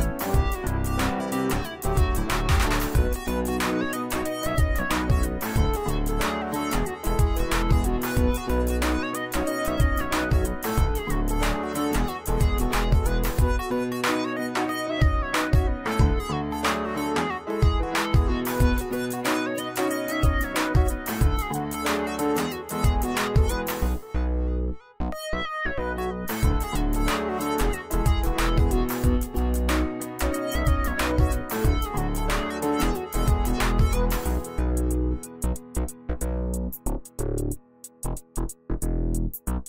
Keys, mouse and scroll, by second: 0.6-1.8 drag, 11.2-12.0 typing, 12.3 click, 13.0-13.5 alt+shift+drag, 14.7 click, 14.8 click, 16.4-18.3 drag, 20.5-21.2 typing, 29.8 shift+a, 31.3 Caps_Lock, 31.7-33.0 typing, 34.2 click, 36.3-36.9 alt+shift+drag, 39.2-39.6 shift+drag.